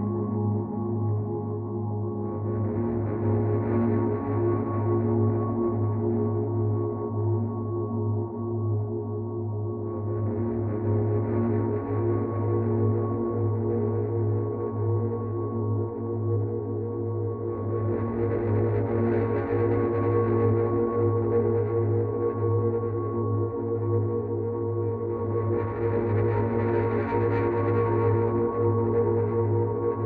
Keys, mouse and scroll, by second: 5.2 click, 14.4 click, 15.7 click, 17.3 click, 24.8 click, 29.2 click.